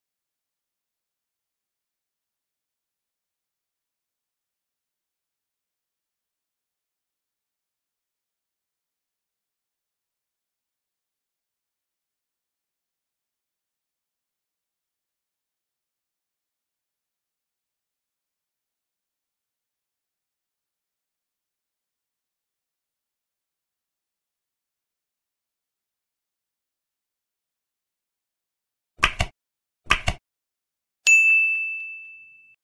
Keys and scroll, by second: 0.4 F7, 3.0 space, 5.4 space, 6.6 space, 11.4 space, 12.8 ctrl+s, 13.7 Down, 14.7 Up, 15.7 ctrl+s, 22.4 ctrl+BackSpace, 24.8 space, 26.1 End.